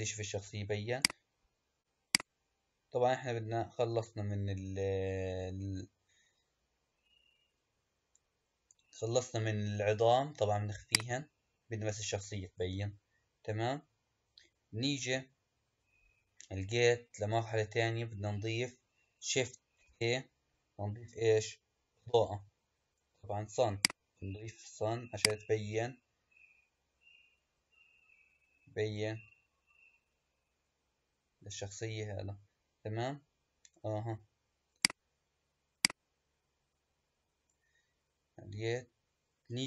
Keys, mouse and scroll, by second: 0.8 click, 2.0 click, 7.4-9.5 scroll up 5, 10.7 click, 11.5-14.3 scroll down 3, 16.7-18.3 scroll down 2, 19.7 shift+a, 25.0 click, 34.6 click, 35.7-38.7 drag.